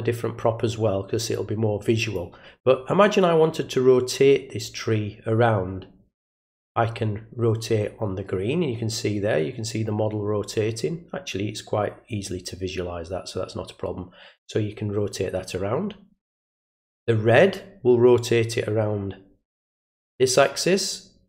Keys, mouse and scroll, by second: 6.4-16.7 drag, 17.5-21.2 drag.